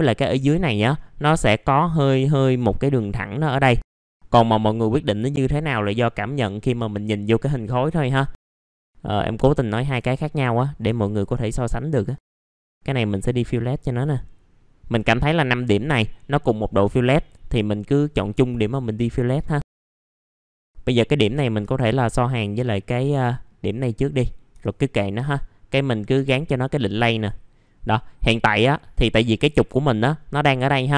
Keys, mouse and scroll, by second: 3.6-6.1 scroll down 1, 6.1 middle click, 6.4-8.0 scroll down 1, 8.0-8.6 scroll up 1, 8.6 click, 9.0 middle click, 10.8-15.7 ctrl+drag, 16.9-17.5 scroll down 1, 17.5 middle click, 17.9-18.6 scroll up 1, 19.3 click, 19.8-20.3 scroll down 2, 20.0 right click, 20.4 middle click, 20.6-22.4 drag, 22.9 1, 23.2 middle click, 23.4 scroll down 1, 26.9 click.